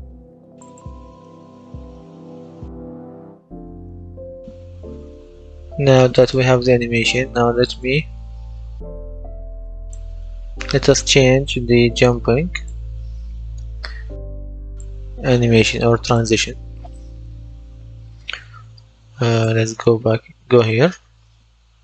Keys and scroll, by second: 1.0-2.2 typing, 3.4 d.